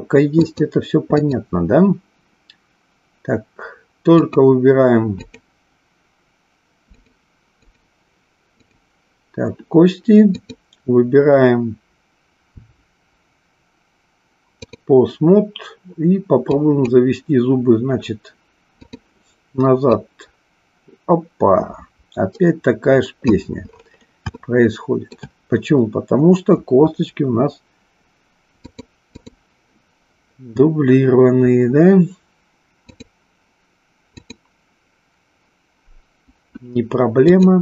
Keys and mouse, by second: 0.3-1.4 drag, 4.2 click, 5.2 click, 6.9 click, 7.7 click, 8.4 click, 10.4-14.9 drag, 16.5-17.0 drag, 18.8 click, 19.9-23.4 drag, 24.4-25.2 shift+middle drag, 28.7 click, 34.1 click, 37.2-37.6 drag.